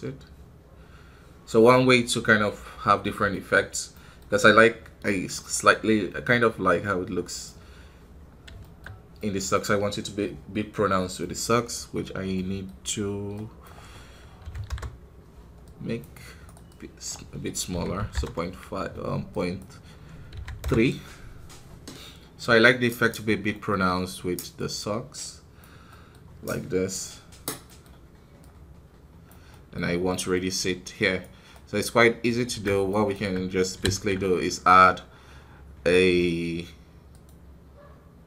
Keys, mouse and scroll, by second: 2.7-3.3 scroll down 1, 3.8 middle click, 4.1-5.5 scroll up 3, 5.7-8.1 drag, 8.1-8.5 scroll down 1, 8.5-14.6 shift+middle drag, 14.6-26.4 drag, 26.4-28.3 middle drag, 28.3-30.0 drag, 30.0-32.8 middle drag, 32.8-38.2 right drag.